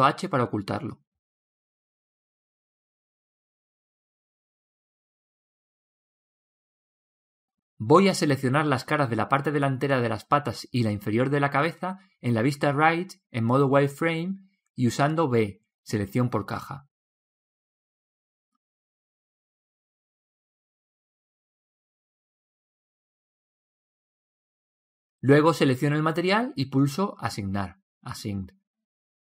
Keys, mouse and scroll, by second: 7.2 click, 10.2 click, 12.9 b, 17.5-19.4 middle drag, 19.7-21.4 middle drag, 21.2 b, 26.7 click, 28.5-29.2 middle drag.